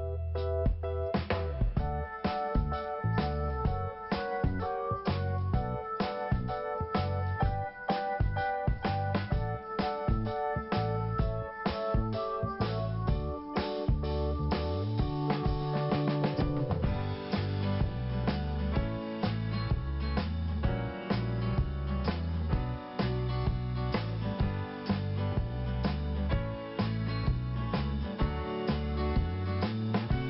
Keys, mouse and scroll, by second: 3.3 click, 8.0-8.5 scroll down 1, 8.5 scroll up 1, 9.0 click, 9.9 click, 11.6 click, 12.3 click, 13.0 click, 14.5 click, 15.2 click, 17.0 click, 17.8 click, 18.8 click, 19.6 click, 20.9 click, 21.9 click, 23.6 click, 24.4 click, 25.8 click, 26.5 click, 27.7 scroll down 1, 28.6 scroll up 1, 29.3 click, 30.0 click.